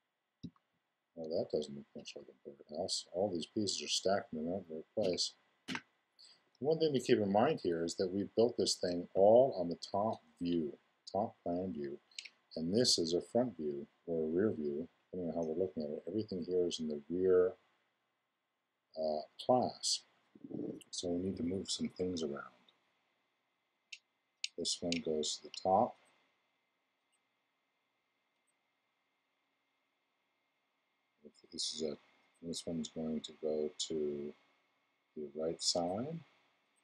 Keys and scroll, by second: 0.4 2, 5.0 l.